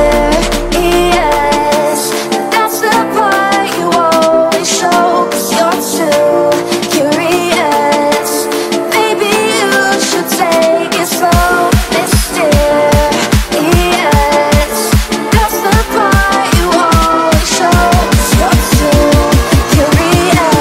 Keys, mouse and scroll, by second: 0.5-2.1 typing, 3.5 Return, 4.3-13.1 drag, 13.5 right click, 13.5 F10, 14.0-20.6 drag.